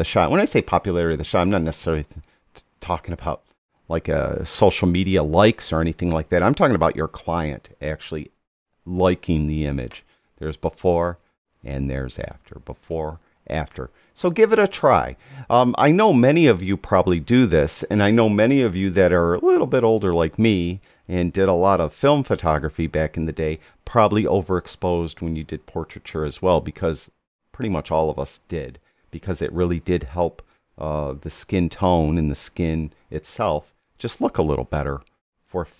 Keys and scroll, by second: 9.3 \, 11.1 \, 12.2 typing, 13.9 typing.